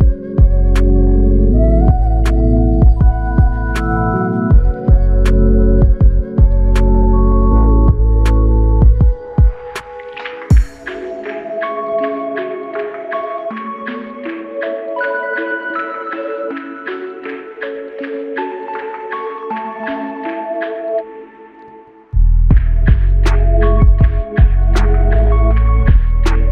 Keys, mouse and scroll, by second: 4.1 double click.